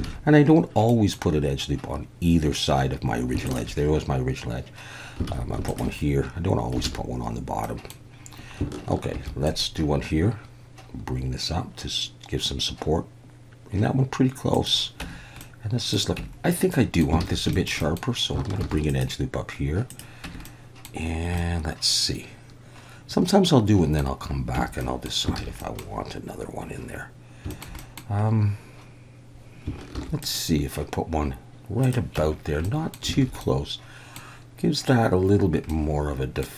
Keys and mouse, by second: 0.1 alt+a, 0.9 click, 3.5 alt+shift+click, 5.3 alt+a, 6.8 alt+a, 7.6 middle click, 9.1 ctrl+r, 14.5 click, 15.0 Tab, 15.4 middle click, 16.2 Tab, 16.7 middle drag, 17.2 alt+a, 17.5 shift+middle click, 17.9 middle click, 18.6 ctrl+r, 19.9 click, 20.3 Tab, 20.4-20.8 middle drag, 21.4-24.0 middle drag, 24.5 Tab, 24.8 middle click, 25.4 alt+a, 25.6 middle click, 27.5 shift+middle click, 27.8 middle click, 29.9 ctrl+r, 31.8 click, 32.2 Tab, 32.6 middle click, 33.1 alt+a, 33.4-34.1 middle drag, 35.7-36.4 middle drag.